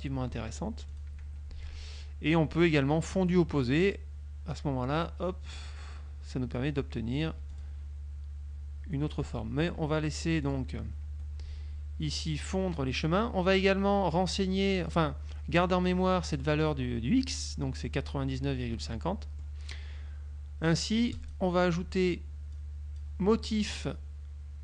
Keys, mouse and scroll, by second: 0.8 F1, 1.0 click, 1.3 F2, 3.3 click, 4.6-7.4 drag, 7.4 F1, 7.6 click, 9.4 ctrl+z, 10.6 click, 11.2 F2, 14.5 click, 19.2 middle click, 21.2 click, 22.6 click.